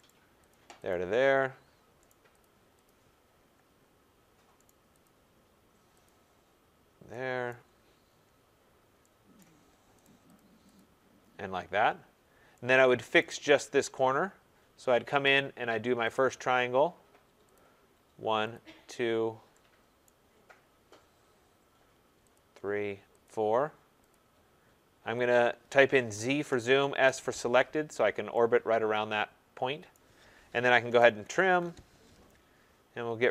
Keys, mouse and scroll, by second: 0.0 right click, 0.4 click, 0.8 click, 2.0 right click, 2.3 click, 2.8 click, 3.6-4.6 scroll, 4.6 right click, 5.0 click, 6.0 click, 7.5 right click, 7.7 middle click, 7.7 middle click, 7.8 middle click, 8.1 middle click, 8.1 middle click, 8.2 middle click, 9.4 right click, 10.0 right click, 10.3 click, 10.7 click, 11.3 middle click, 11.4 middle click, 11.8 middle click, 11.8 middle click, 13.2 right click, 13.7 middle click, 13.8 middle click, 13.9 middle click, 15.9 scroll, 16.1 click, 16.5 middle click, 17.5 click, 18.5 click, 20.0 right click, 20.3 middle click, 20.9 middle click, 22.3 click, 23.2 click, 24.1 click, 25.3 click, 26.3-27.0 typing, 27.9 middle click, 28.3-29.0 typing, 28.3 middle click, 29.9 right click, 30.6-32.5 typing.